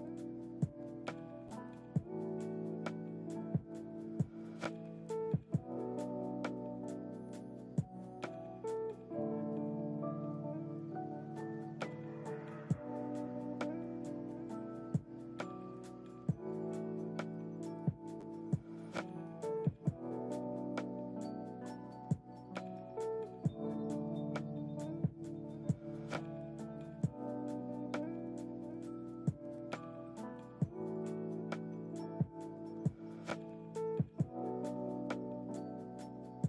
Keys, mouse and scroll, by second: 4.8 space, 5.4 ctrl+z, 5.7 ctrl+z, 5.8 ctrl+z, 6.1 ctrl+z, 6.6 ctrl+z, 7.6 click, 10.5-11.5 scroll down 3, 12.8-14.6 drag, 15.6 click, 18.2 click, 19.1 drag, 19.9 click, 21.0 click, 22.3 click, 26.7 click, 28.1 space, 30.7 click, 31.5-34.0 drag, 34.1 space, 35.3 ctrl+z, 36.2 click.